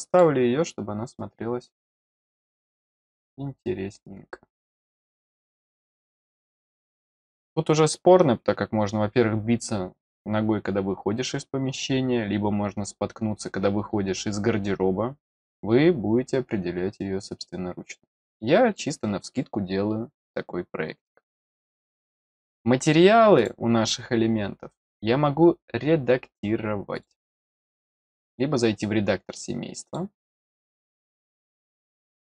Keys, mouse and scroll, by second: 0.0 click, 2.1 click, 4.9 click, 5.9-8.3 middle drag, 5.9-8.3 scroll up 1, 22.4 click, 23.3 click, 26.9 click, 28.1 click, 29.8 click, 30.3 click.